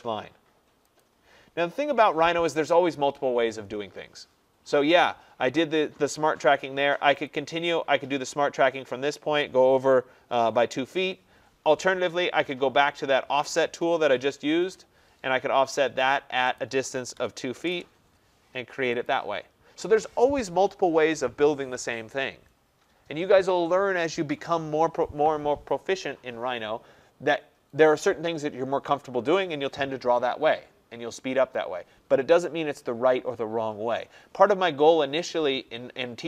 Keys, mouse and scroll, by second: 1.1 click, 1.6-3.2 scroll, 7.3 click, 12.0 Escape, 13.9-14.7 typing, 16.7 click, 17.0-17.8 typing, 19.1 click.